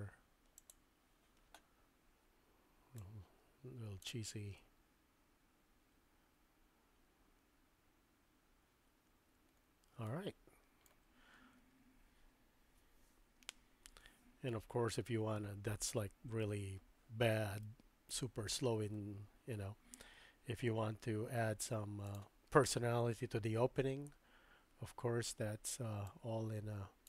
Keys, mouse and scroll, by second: 0.6 click, 3.0-4.1 drag, 4.5 space, 10.0-16.5 middle drag, 15.9 space, 17.7 middle click, 22.0 click, 26.0-27.0 drag.